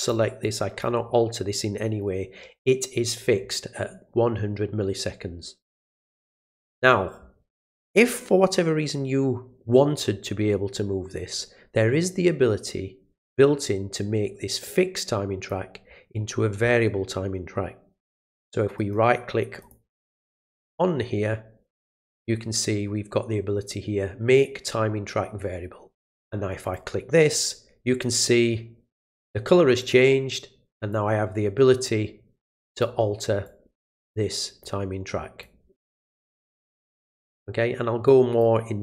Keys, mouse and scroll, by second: 0.4 click, 14.6 click, 18.7 right click, 19.6 click, 20.1 click, 20.4 right click, 26.6 click, 29.8 click, 30.9-32.8 drag, 33.4-34.6 drag, 35.4-36.4 drag, 36.8 click, 38.0 click.